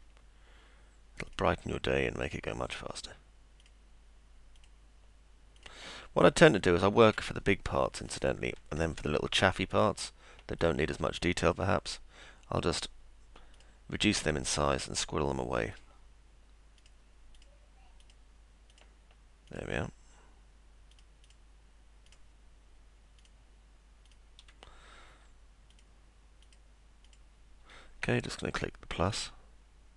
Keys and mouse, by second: 1.3 ctrl+click, 2.4 ctrl+click, 3.6 ctrl+click, 4.6 ctrl+click, 5.6 ctrl+click, 6.6 ctrl+click, 9.7 ctrl+click, 10.6 ctrl+click, 11.5 click, 12.8 click, 13.6 click, 14.7 click, 15.7 click, 16.8 click, 17.4 click, 18.0 click, 18.7 click, 19.5 click, 20.9 click, 22.1 click, 23.2 click, 24.1 click, 25.8 ctrl+click, 26.4 ctrl+click, 27.1 ctrl+click.